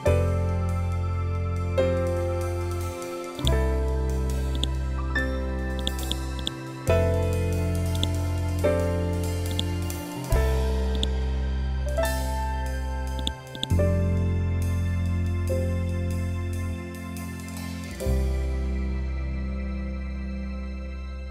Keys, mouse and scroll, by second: 14.3 scroll up 1, 16.3 scroll down 1, 21.2 click.